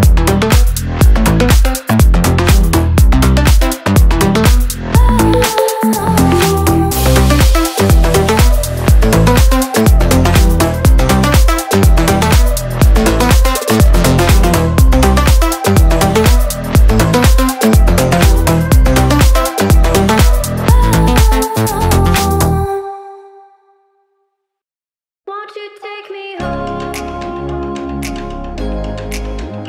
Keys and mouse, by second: 8.4 a, 8.8-10.1 right drag, 12.3 a, 12.4 Tab, 12.7 click, 16.6 Tab, 16.9 l, 20.0 a, 20.8 a, 20.8 Tab, 22.0 Tab, 22.9 ctrl+z, 24.0 right click, 25.3 g, 25.7 right drag, 26.0 right click, 26.6 g, 27.0 right click, 27.3 a, 27.4 Tab, 28.1 right click, 28.2 ctrl+g.